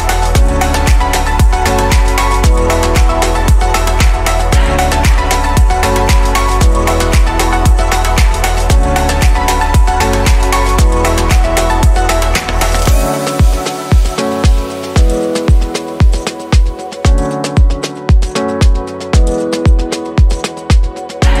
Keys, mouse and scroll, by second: 7.0-9.3 middle drag, 9.3 click, 15.3 click, 15.9-19.8 middle drag, 19.8-21.4 scroll down 3.